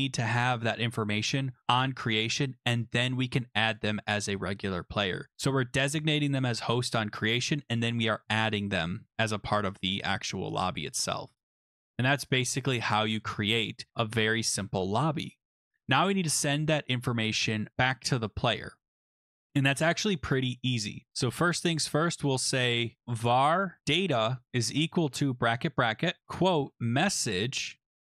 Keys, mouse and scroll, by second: 2.3 click, 3.7 click, 10.9 click, 11.8 click, 12.5 Return, 12.7 Return, 22.7-28.1 typing, 28.0 Right.